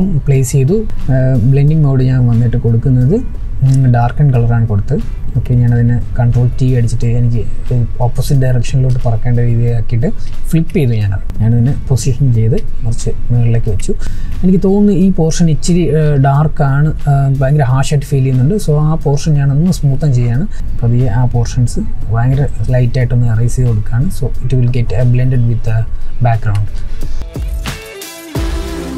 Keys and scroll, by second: 5.1 ctrl+t.